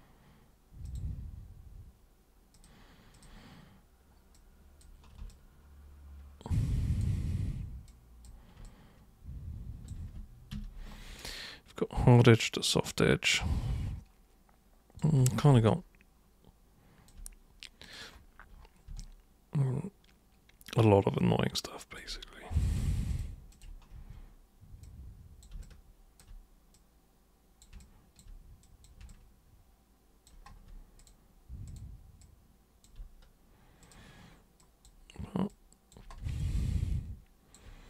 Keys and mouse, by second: 0.9 super+click, 2.5 super+click, 3.1 super+click, 4.3 super+click, 5.2-7.0 alt+super+drag, 7.8 super+click, 8.6-9.9 alt+super+drag, 10.5 super+3, 11.3-15.0 alt+super+drag, 15.2 super+1, 15.7-17.1 alt+super+drag, 17.8 super+click, 19.0-22.0 alt+super+drag, 22.6 click, 23.1 ctrl+shift+click, 23.5 ctrl+shift+click, 24.0 w, 24.8-25.4 drag, 25.6-26.1 alt+drag, 26.7 super+click, 27.8-28.2 alt+super+drag, 28.6 super+click, 29.1-30.3 alt+super+drag, 31.0 super+click, 31.6 super+click, 32.2 super+click, 33.8 super+click, 34.6 super+click, 35.5 super+click, 36.4-37.5 alt+super+drag.